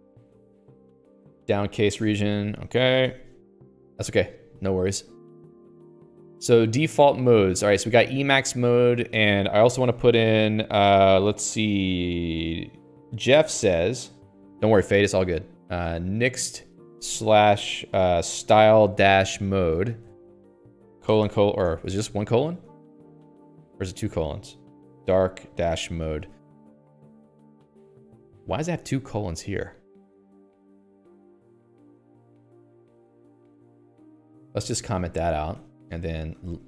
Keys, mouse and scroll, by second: 0.0-2.5 typing, 2.7 Escape, 2.8 Escape, 3.2 ctrl+s, 3.4 Escape, 3.5 Escape, 4.2 Escape, 4.5-5.7 l, 6.3 h, 7.2-8.2 l, 9.0 a, 10.0 Escape, 10.3 i, 16.2-35.1 typing, 24.3 Right, 27.3 ctrl+s, 27.5 Escape, 27.7 Escape, 30.7 ctrl+s, 31.1 Escape, 31.2 Escape, 33.1 ctrl+s, 33.6 Escape, 35.2 alt+/, 35.4 ctrl+s, 35.7 Escape.